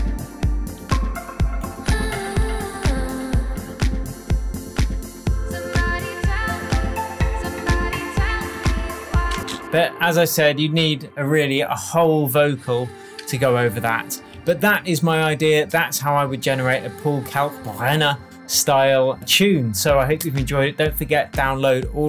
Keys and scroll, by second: 9.3 space, 14.3 super+s.